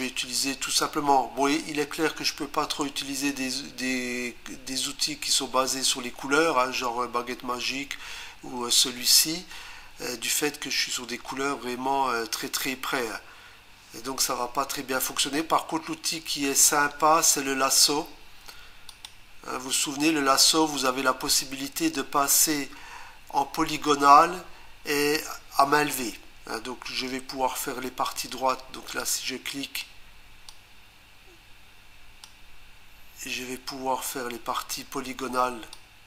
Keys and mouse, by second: 18.9 click, 29.0 click, 30.5 click, 35.7 click.